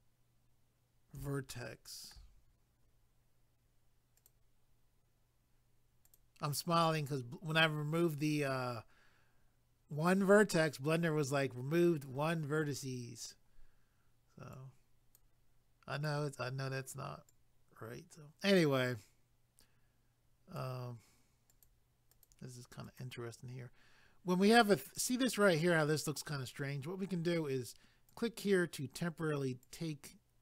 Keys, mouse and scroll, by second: 1.5 shift+middle click, 2.4 scroll up 1, 4.2 click, 6.0 click, 14.5 click, 16.0 click, 17.3 click, 21.5 click, 22.1 click, 22.8 click, 28.1 click, 29.6 click.